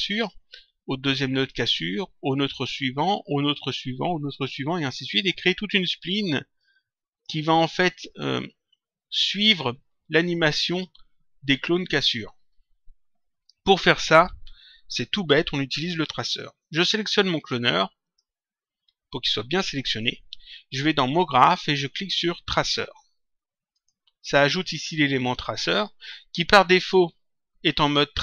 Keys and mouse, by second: 6.5 click, 18.0 click, 21.3 click, 23.6 click.